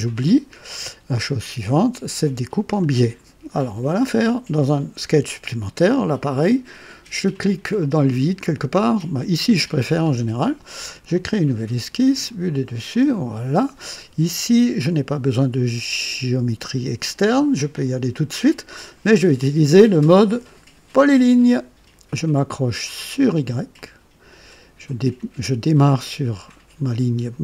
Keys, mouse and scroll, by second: 1.2 click, 3.4 click, 7.7 click, 9.0 click, 11.1 click, 12.1 click, 12.9 click, 21.0 click, 23.7 click.